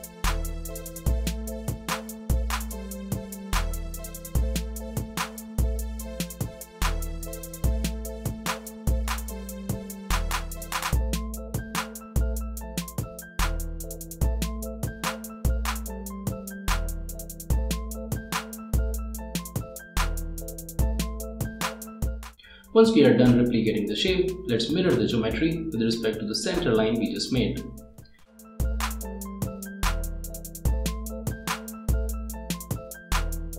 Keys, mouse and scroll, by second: 0.5 right click, 1.7 click, 2.3 click, 3.0 scroll down 1, 3.5 click, 3.7 Delete, 3.7 click, 5.2 click, 6.8 click, 7.4 click, 8.1 click, 8.5 scroll, 8.7 click, 9.0 Delete, 9.2 click, 9.8 click, 11.3 scroll up 1, 11.4 click, 13.3-14.5 drag, 14.6 click, 16.5 click, 18.4 click, 19.2 click, 21.0 click, 22.8-25.3 drag, 25.4 ctrl+click, 27.5 click, 29.1 click, 30.7 click, 31.6 right click.